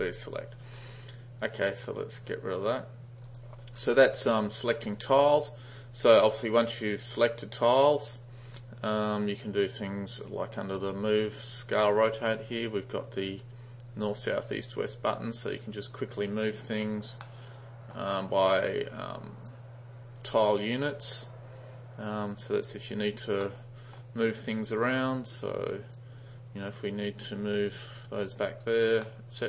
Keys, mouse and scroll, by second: 1.6 click, 3.4 click, 7.8-8.2 drag, 10.8 click, 15.5 click, 16.2 click, 17.3-18.0 middle drag, 19.4 click, 22.2 click, 23.5-24.0 middle drag, 24.7 drag, 26.0 drag, 27.7 click, 28.0 click, 29.1-29.4 middle drag.